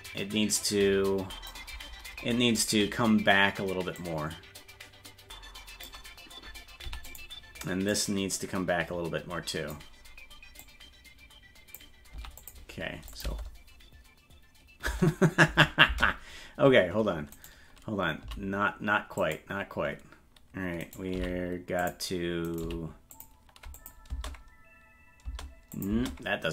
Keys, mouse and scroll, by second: 4.0 click, 7.9-9.0 drag, 10.6-11.8 drag, 13.1-15.2 drag, 13.2 space, 17.3 right click, 18.2 g, 20.8 right click, 21.1 g, 22.5 right click, 22.6 g, 23.8 click, 24.1 space, 25.7 click, 25.9 space.